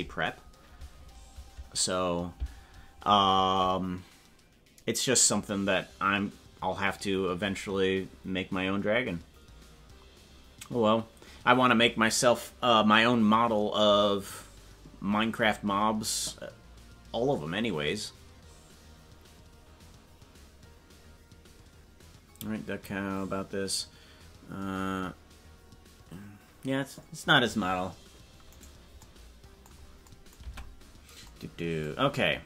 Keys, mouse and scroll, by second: 30.4 Tab.